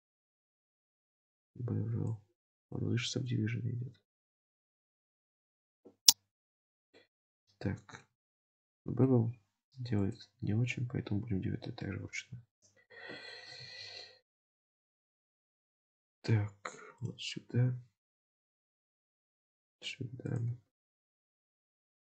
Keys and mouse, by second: 2.1-2.7 drag, 5.2 click, 7.0-8.1 middle drag, 8.1 Tab, 8.8 middle click, 10.0 click, 11.2 Tab, 11.9 middle click, 13.5 KP_7, 14.6 ctrl+r.